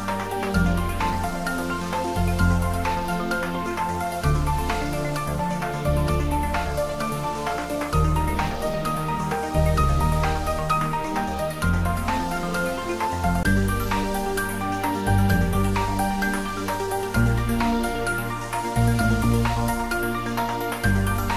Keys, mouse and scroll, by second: 6.2 Return, 7.9 scroll up 1, 8.1 g, 8.7 Return, 10.3 click, 11.4 click, 12.3 click, 20.4 scroll up 1, 20.6-20.9 scroll down 1, 21.0 click.